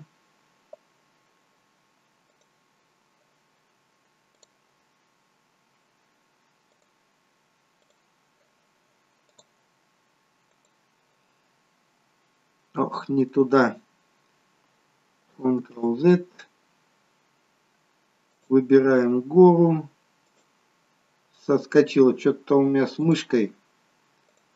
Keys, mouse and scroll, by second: 2.3 click, 12.0 scroll down 1, 12.8 middle click, 16.1 ctrl+z, 18.3 click, 20.2 click.